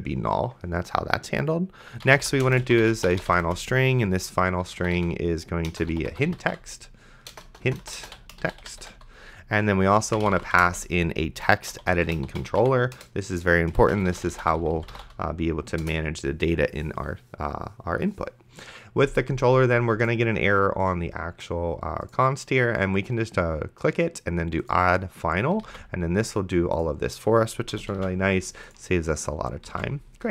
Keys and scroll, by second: 1.8-15.6 typing, 9.7 Return, 15.8 Return, 25.9 ctrl+s, 27.7 ,, 28.2 ctrl+s, 30.0 ctrl+s.